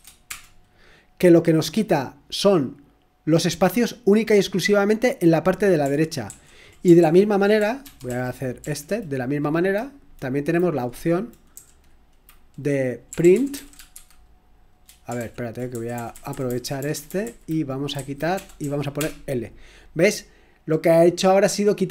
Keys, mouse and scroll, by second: 0.0-0.3 typing, 2.7-3.5 typing, 6.2 ctrl+o, 7.0 ctrl+p, 7.8 ctrl+c, 8.0 ctrl+l, 8.6 ctrl+p, 11.6 Down, 12.8-14.4 typing, 15.1 ctrl+p, 15.7 Left, 15.9 Left, 16.1 Left, 16.3 Left, 16.4 Left, 16.7 Left, 16.9 Left, 17.0 Left, 17.2 Left, 18.0 Left, 18.3-21.9 typing.